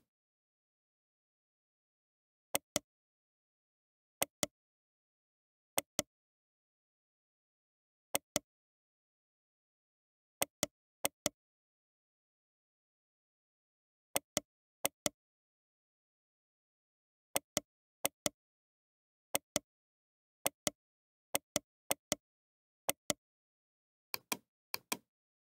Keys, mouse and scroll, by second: 1.5 middle click, 1.6 middle click, 2.5 click, 3.4-4.9 right drag, 3.4 h, 4.9 middle click, 5.1 middle click, 5.3 right click, 5.3-8.2 middle drag, 8.2 right click, 8.7-11.0 middle drag, 9.7 g, 11.0-14.5 right drag, 11.3 g, 14.9-16.5 right drag, 18.0-23.7 right drag, 18.3 g, 20.8 g, 22.2 g, 24.3 right click, 25.2 click.